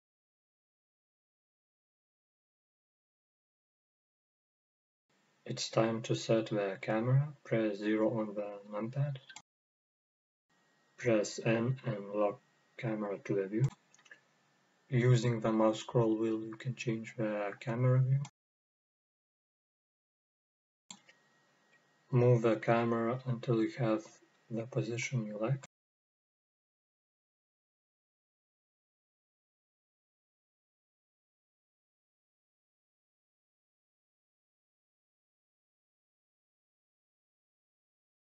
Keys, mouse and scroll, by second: 4.8 drag, 5.6-6.9 scroll down 1, 6.9 KP_0, 9.1 n, 9.7-11.0 scroll down 1, 11.0 click, 11.6-13.5 scroll down 1, 13.5 click, 14.2-14.5 scroll down 1, 15.6-17.1 shift+scroll up 1, 17.1-25.6 drag, 18.3-19.0 scroll down 2, 19.0-19.4 scroll up 2, 19.5 scroll down 1, 21.5-22.9 scroll up 2, 26.7 drag, 27.3-31.4 middle drag, 30.0-31.4 scroll up 1, 31.4 click, 34.2-38.3 middle drag.